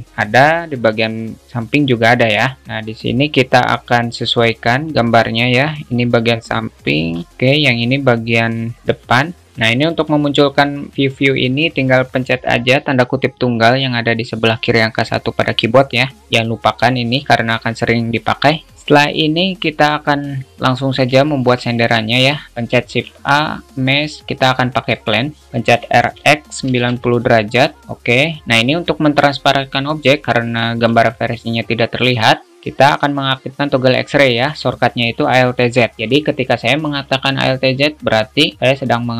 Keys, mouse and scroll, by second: 4.4-7.1 drag, 7.5 click, 8.5-9.5 drag, 21.5 alt+shift+middle drag, 23.1 shift+a, 27.9-29.5 drag, 32.2 click, 32.2 middle click, 35.7 drag, 35.7 middle drag.